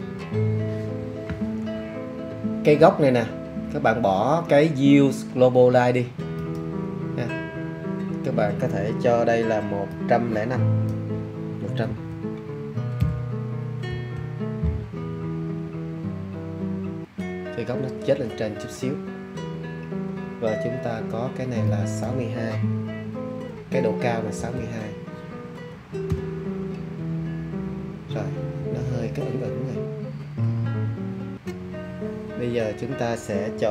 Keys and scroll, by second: 11.8 1, 12.9 0, 13.8 5, 24.3 6, 26.0 2.